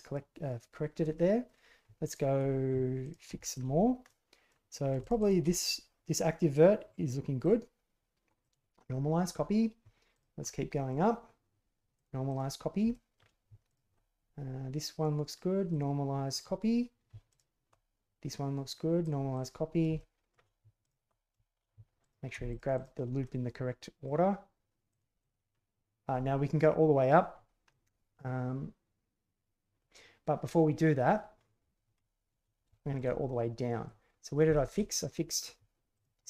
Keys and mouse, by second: 1.1-1.5 middle drag, 2.0 alt+middle click, 3.0 alt+middle click, 3.4 shift+click, 4.0-4.5 middle drag, 5.0 shift+click, 5.2 shift+click, 7.4 drag, 8.5-8.9 drag, 8.9-9.4 middle drag, 10.1 alt+click, 10.4-10.9 middle drag, 12.0-12.4 drag, 12.9 shift+drag, 13.7 alt+click, 15.7 click, 16.3-17.1 drag, 17.3 alt+right click, 19.1 click, 19.9 shift+middle click, 20.8 alt+right click, 22.0 alt+click, 22.5 shift+click, 22.7 shift+click, 23.2-24.0 drag, 25.2 click, 27.7-29.8 middle drag, 32.7 shift+middle drag, 33.1-33.9 middle drag, 34.5 shift+middle drag, 35.0-35.3 middle drag, 35.9 alt+click.